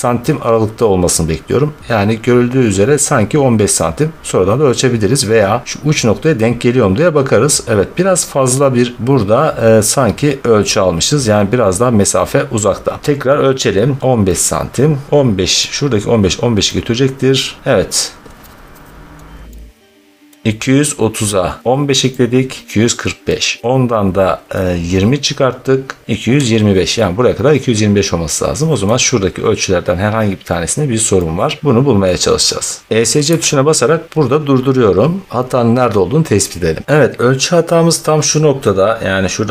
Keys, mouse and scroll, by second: 2.0-3.4 scroll, 3.6-4.7 scroll, 5.5 middle click, 8.1 scroll, 13.9-15.2 middle drag, 15.5-16.1 middle drag, 17.6 middle click, 19.1 middle click, 20.5 middle click, 22.9-23.4 scroll, 28.7-31.3 middle drag, 31.9 scroll, 32.8 middle click, 33.2 Escape, 35.7 scroll, 36.8 click, 36.8 scroll, 38.5 scroll.